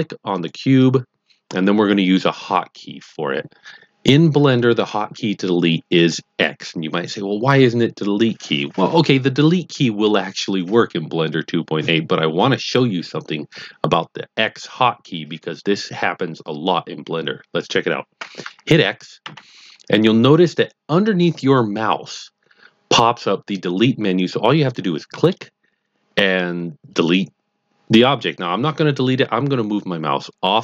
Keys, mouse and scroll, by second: 0.6 click, 19.2 x.